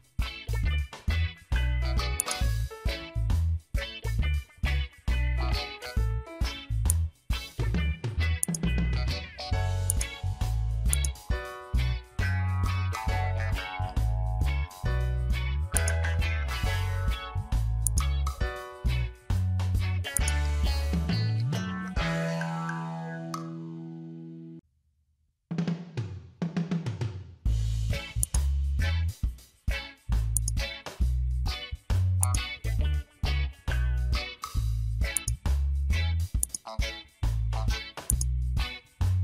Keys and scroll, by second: 0.5 ctrl+t, 5.5 Return, 7.7 ctrl+j, 11.4 ctrl+a, 11.9 Caps_Lock, 16.8 ctrl+t, 19.6 Return.